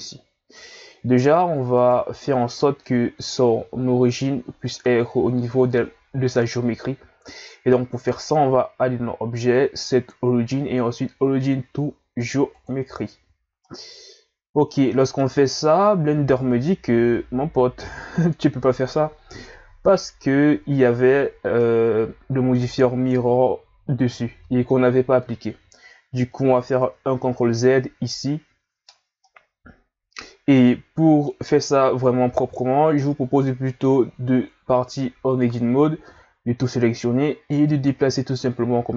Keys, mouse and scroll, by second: 2.6-5.6 ctrl+scroll down 4, 5.6 scroll down 1, 8.1 click, 13.6-16.7 middle drag, 21.6-24.6 middle drag, 26.7 ctrl+z, 29.2-32.3 middle drag, 32.9 Tab, 34.2 a, 34.7 a, 37.7 click.